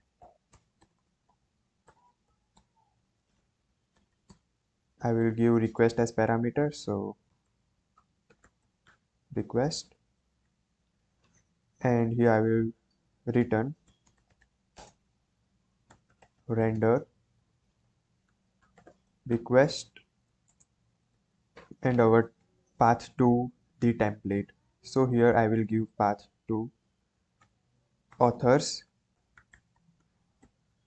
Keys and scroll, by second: 0.0-4.0 typing, 4.2 Return, 4.8 Up, 4.9 Right, 5.1 Right, 7.0-9.3 typing, 9.4 Right, 9.9 Right, 10.4 Down, 13.1-19.9 typing, 21.1 shift+', 27.4-30.8 typing.